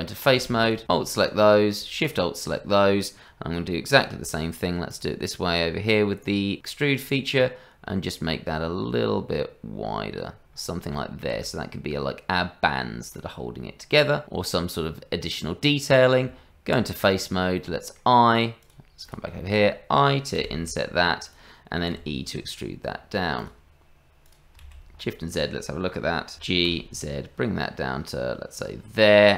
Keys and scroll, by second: 16.2 Tab, 20.4 o, 20.4 i, 21.9 e, 24.6 shift+z, 26.3 g.